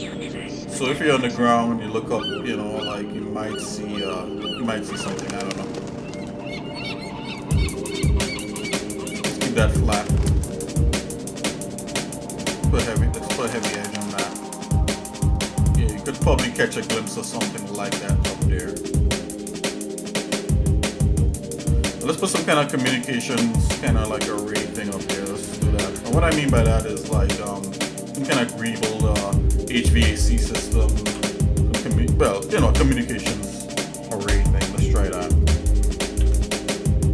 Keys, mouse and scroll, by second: 0.4 middle click, 0.8 scroll down 1, 1.3 shift+middle click, 2.2 middle click, 2.8 shift+middle click, 3.5 middle click, 4.2 shift+middle click, 4.7 middle click, 5.7 scroll up 1, 6.5 ctrl+b, 14.3-15.9 shift+middle drag, 16.2 middle click, 16.8 scroll down 1, 17.5 shift+middle click, 18.8 scroll up 1, 19.2 middle click, 19.7 shift+middle click, 20.5-21.2 scroll up 3, 21.2 shift+middle click, 23.3 shift+middle click, 25.2 Tab, 25.5 click, 25.8 Tab, 27.1 click, 27.8 click, 28.1 ctrl+Tab, 29.0 click, 29.6 shift+middle click, 31.0 KP_7, 32.9 middle click, 32.9-33.5 scroll up 3, 33.8 middle click, 34.4 scroll up 1, 34.7 middle click, 36.1 shift+d.